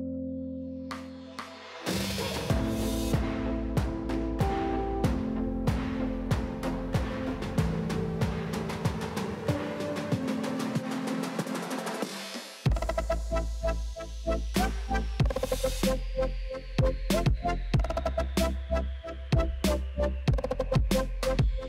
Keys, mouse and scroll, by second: 0.2 click, 0.8-1.5 scroll down 1, 1.5 click, 2.5-4.0 middle drag, 5.0 click, 5.3 shift+middle click, 5.5 scroll up 3, 5.8-9.4 shift+middle drag, 9.4 alt+click, 11.9 click, 12.6-13.2 drag, 13.2 scroll down 4, 13.5-14.2 middle drag, 14.2 click, 14.4-14.9 scroll down 1, 14.9 alt+click, 15.1 middle click, 15.8 alt+click, 16.1-16.9 shift+middle drag, 16.9 alt+shift+click, 17.3 click, 17.8 click, 18.0 shift+click, 18.3 shift+click, 18.5 shift+click, 18.9 shift+click, 19.1 middle click, 19.8 shift+click, 20.0 shift+Left, 20.1 shift+Left, 20.3-21.4 middle drag, 21.4 alt+Left.